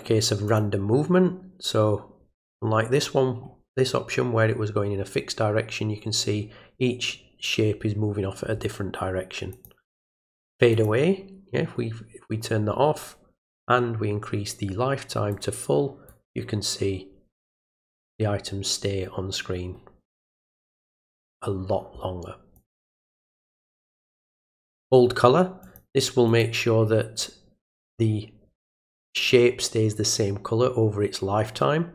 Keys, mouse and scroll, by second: 0.5 click, 9.5 click, 10.7 click, 15.3 click, 22.5 click, 24.3 click, 25.6 click, 26.3 click.